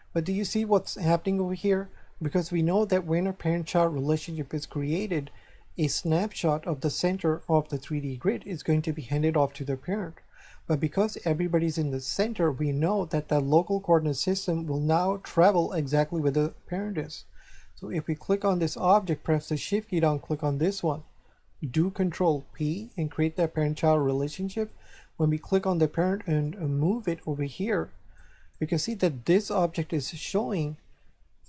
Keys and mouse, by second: 18.0 right click, 20.3 shift+right click, 21.9 ctrl+p, 23.2 click, 24.6 right click, 26.3 click, 27.1 shift+middle click, 28.3 right click, 28.7 click, 29.3 right click.